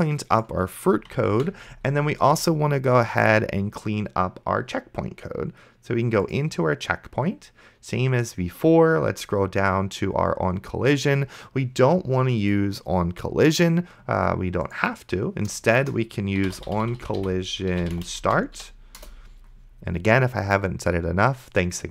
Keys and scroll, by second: 1.6 ctrl+s, 15.9 Return, 16.2-19.1 typing.